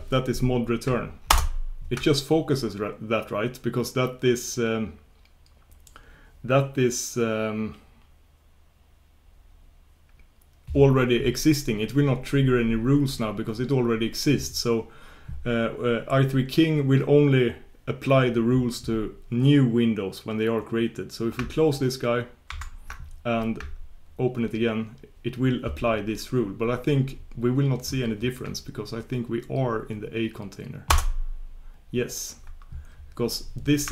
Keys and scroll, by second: 6.3 super+Return, 22.6 shift+super+q.